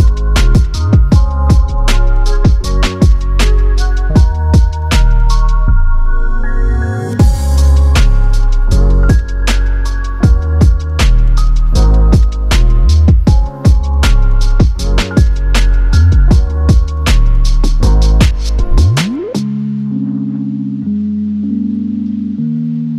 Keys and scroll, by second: 8.4 super+c, 15.9 super+c, 18.8 space.